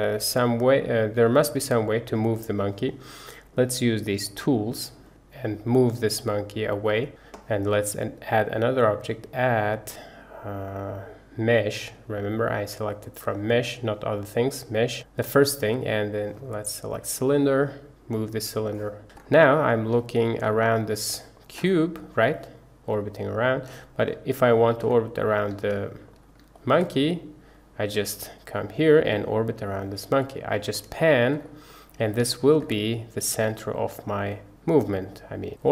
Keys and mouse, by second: 4.3 click, 5.1 click, 5.3-7.1 drag, 8.4-16.0 drag, 17.4-18.7 drag, 19.6-19.9 middle drag, 20.1 shift+middle click, 20.6-20.9 middle drag, 21.1 shift+middle click, 21.7-23.7 middle drag, 24.3 shift+middle click, 25.7-26.1 shift+middle drag, 26.6 shift+middle click, 27.0-30.6 middle drag, 30.8-31.3 shift+middle drag, 31.5 middle click, 32.3 shift+middle drag, 32.7-35.7 middle drag.